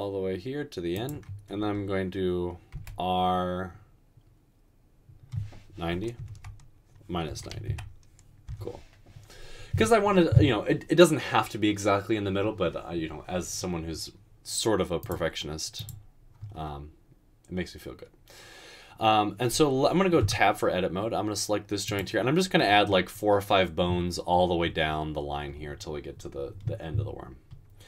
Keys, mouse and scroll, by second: 2.8 typing, 6.2 typing, 7.5 typing, 8.5 Return, 20.3 Tab.